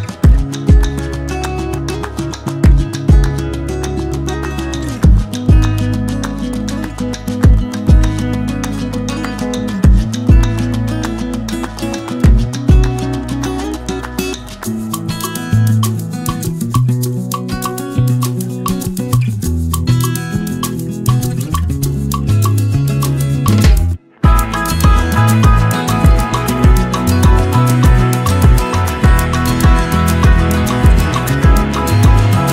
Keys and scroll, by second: 9.8 ctrl+d, 17.2 ctrl+d.